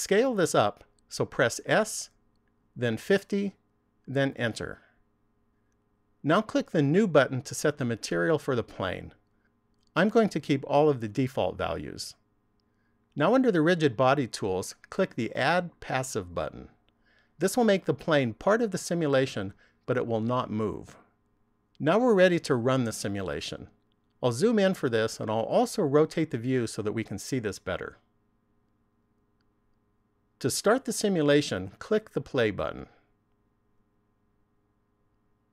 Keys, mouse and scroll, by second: 2.3 s, 7.4 click, 15.9 click, 24.4-26.1 scroll up 3, 26.1 shift+middle click, 28.6 middle click, 32.6 click.